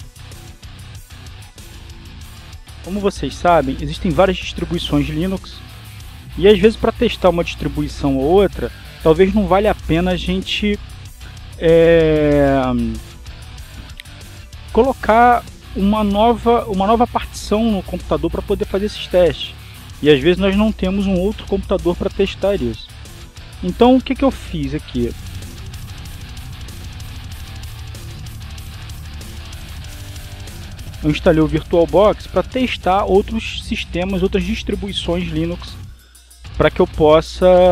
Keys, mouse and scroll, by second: 3.3-6.2 drag, 7.1-8.8 drag.